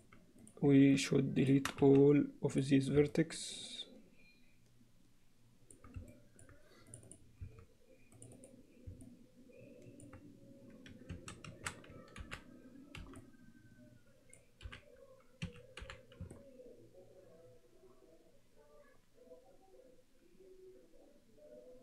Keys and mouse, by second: 1.8 x, 3.2-5.8 middle drag, 6.2 middle click, 6.9 click, 8.2 click, 9.0 middle click, 9.2 alt+click, 11.2 a, 12.2 alt+h, 13.0 c, 15.8 h, 16.4-21.8 middle drag.